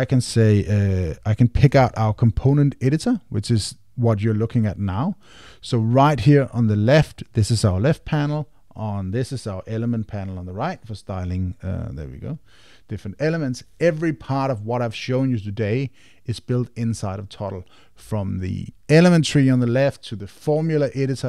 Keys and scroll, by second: 1.7 Return.